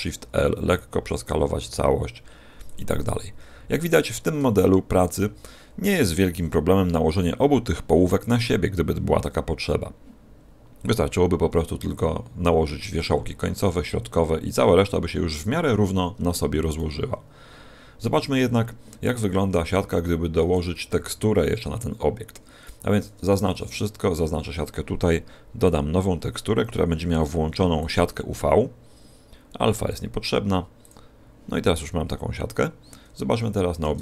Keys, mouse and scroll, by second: 0.3 s, 1.1 click, 1.6 r, 2.6 click, 2.9 g, 3.9 click, 4.4 shift+middle click, 16.6 a, 20.3 a, 20.8 z, 23.2 a, 24.0 a, 25.6 click, 31.8-32.8 scroll down 2, 33.2-33.8 scroll down 4, 33.2 a, 33.8 Tab.